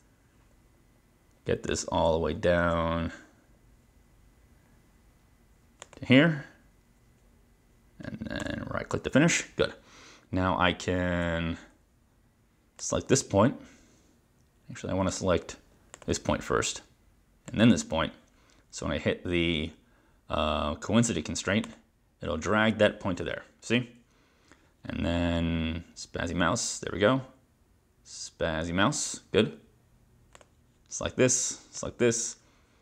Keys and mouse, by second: 1.7 click, 5.9 click, 8.4 right click, 11.2 Escape, 12.8 click, 15.1 click, 16.0 click, 17.5 click, 21.8 click, 30.5 click, 31.9 click.